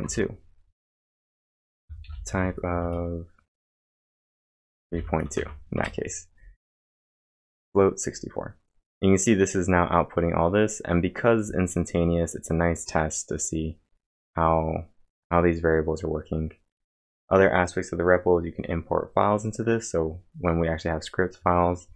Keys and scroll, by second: 0.0-3.2 typing, 5.3 shift+), 5.7 Return.